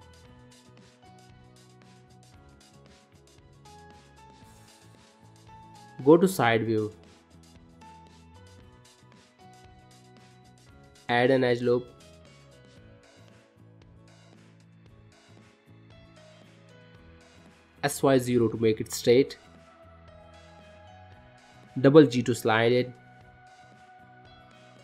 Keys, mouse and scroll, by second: 0.2 middle click, 0.6 scroll down 2, 0.9 shift+middle click, 1.3 middle click, 1.8 shift+middle click, 2.2 middle click, 2.9 middle click, 3.6 shift+middle click, 4.7 click.